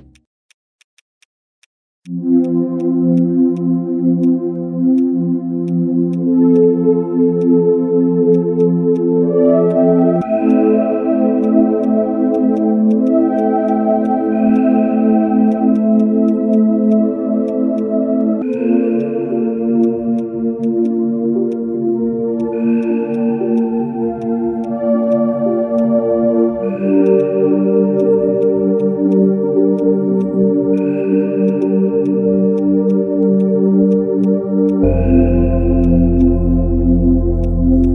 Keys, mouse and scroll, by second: 0.8 shift+click, 1.6 shift+click, 11.4 shift+click, 12.3 shift+click, 13.1 double click, 13.7 shift+click, 25.8 shift+click, 27.1 right click, 31.3 ctrl+z, 31.5 right click, 33.9 shift+click.